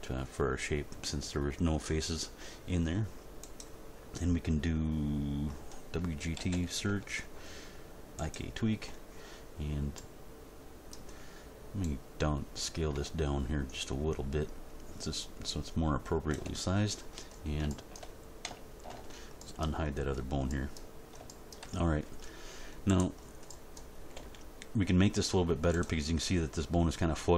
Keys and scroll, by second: 6.3 w, 6.5 g, 6.9 t, 18.9 alt+h, 24.1 g.